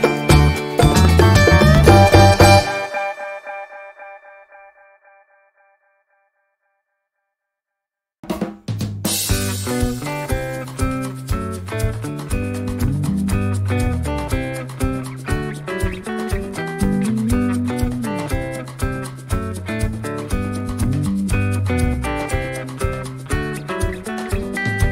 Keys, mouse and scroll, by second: 1.4 click, 2.3 click, 3.1-4.7 drag, 5.3-8.3 drag, 8.9 click, 10.1 click, 10.6 click, 11.1 click, 13.0 ctrl+d, 13.9 click, 15.0 ctrl+z, 15.9 ctrl+shift+g, 19.1 click, 19.6 shift+click, 20.6 shift+click, 21.3 click, 22.8 click, 24.1-24.8 ctrl+scroll down 4.